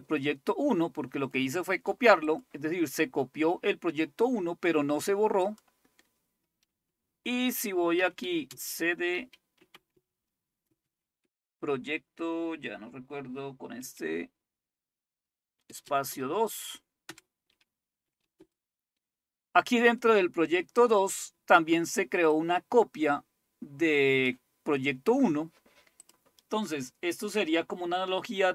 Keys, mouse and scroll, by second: 5.5 click, 8.0-11.7 typing, 13.8 typing, 15.7-20.1 typing, 22.4-24.7 drag, 26.0 click.